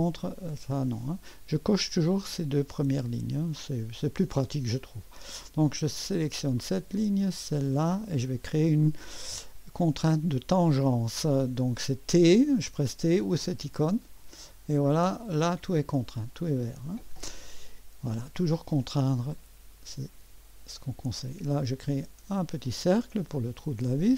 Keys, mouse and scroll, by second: 0.0-4.2 drag, 6.6 click, 7.9 click, 13.8 t, 15.2 click, 18.8 click, 19.5-21.6 scroll up 2, 21.6 click, 22.7 click, 23.4 middle click.